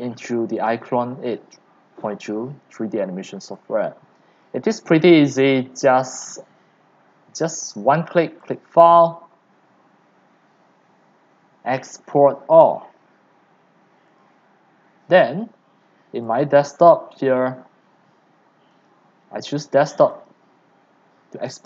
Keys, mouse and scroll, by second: 4.1 click, 4.4-4.7 scroll, 4.7-5.8 scroll down 6, 5.8 right click, 6.7 click, 7.4-8.0 drag, 14.3-18.9 drag.